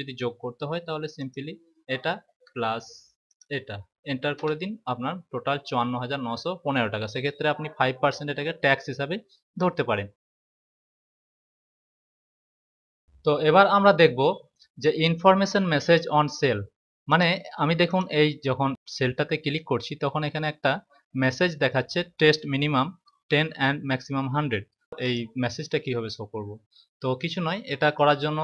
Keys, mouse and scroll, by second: 0.2 =, 3.2 click, 4.3 Return, 17.0 click, 24.9 click.